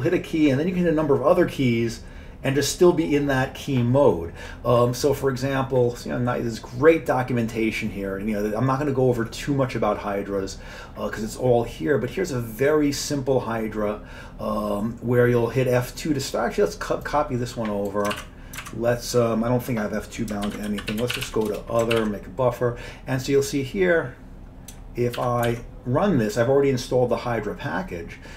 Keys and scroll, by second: 18.1 ctrl+c, 18.6 alt+Tab, 20.5-21.8 typing, 22.0 ctrl+y, 25.2 ctrl+x, 25.5 ctrl+e.